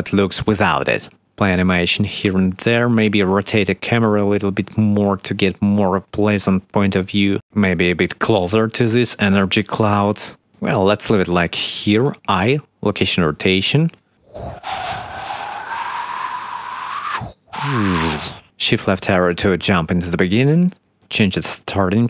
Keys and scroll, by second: 6.0 shift+Right, 6.8-9.0 typing, 10.8 s, 11.1 q, 12.8 i, 19.0 shift+Left, 20.4 shift+`, 21.1 shift+d, 21.8 w.